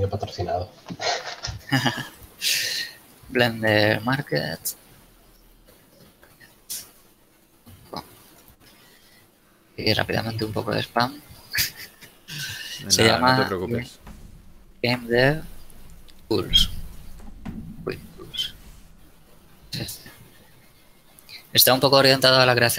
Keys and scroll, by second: 3.2 b, 4.1 r, 5.1 Down, 6.2 BackSpace, 7.1 BackSpace, 8.1 o, 8.8 Return, 13.8 shift+space, 14.4 shift+d, 14.8 shift+v, 15.1 shift+space, 16.3 shift+t, 16.7 shift+o, 17.1 shift+Return.